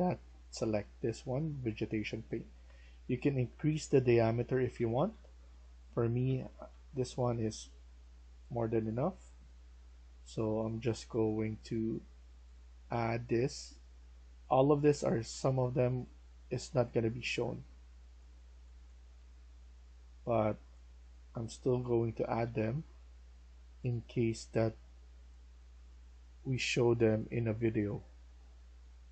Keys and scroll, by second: 1.8-7.1 typing, 10.8 d, 11.2 d, 18.7-19.1 typing, 21.5-22.8 typing.